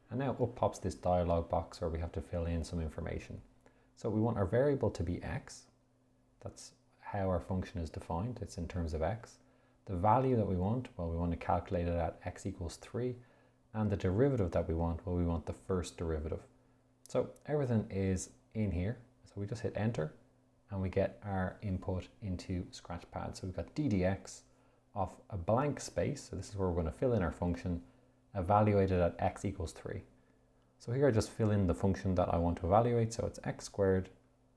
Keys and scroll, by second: 5.3 x, 9.5 Down, 13.0 3, 19.8 Return, 31.5 x, 34.3 -.